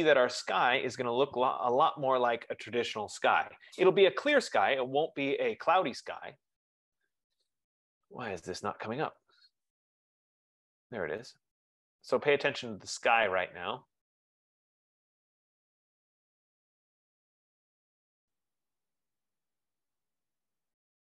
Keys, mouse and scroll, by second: 7.8 click, 10.2 click.